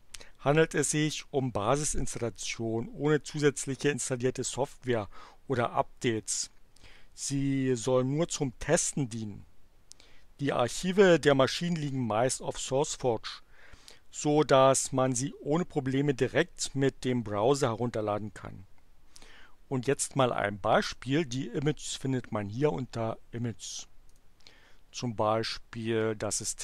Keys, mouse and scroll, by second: 24.1 click.